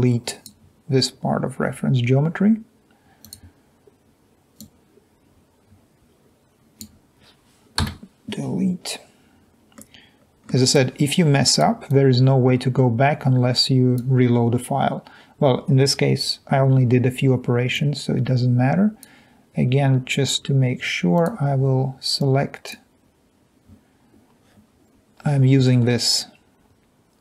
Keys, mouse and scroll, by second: 5.3-6.8 drag, 7.9 Delete, 13.1-14.1 drag, 17.9 click, 22.4 click.